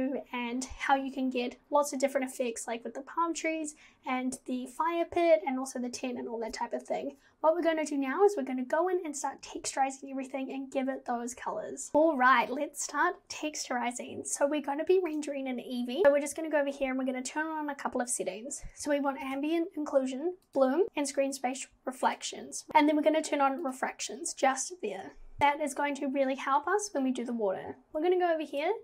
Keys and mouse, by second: 19.3 click, 20.5 click, 22.1 click, 23.6 click.